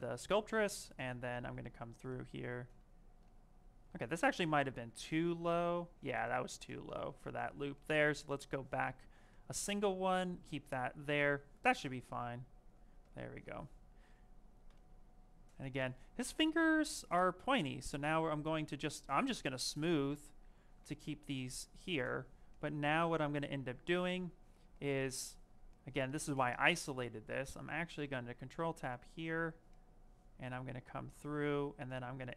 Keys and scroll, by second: 4.6 ctrl+z, 11.0 s, 12.5 s, 14.0 s.